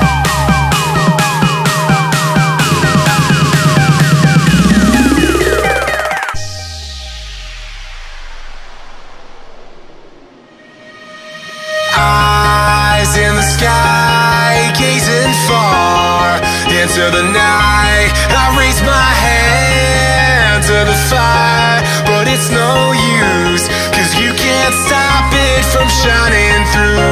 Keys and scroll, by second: 19.6 ctrl+z.